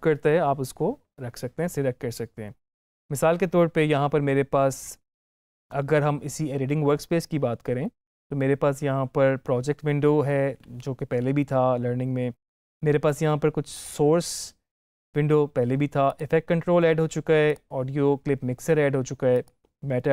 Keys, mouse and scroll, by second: 13.6 click, 16.0 click.